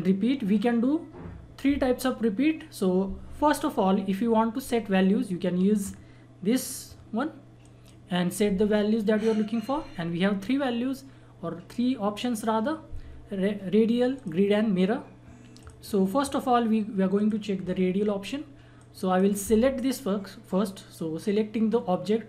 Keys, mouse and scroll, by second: 6.5 click, 14.1-21.7 drag.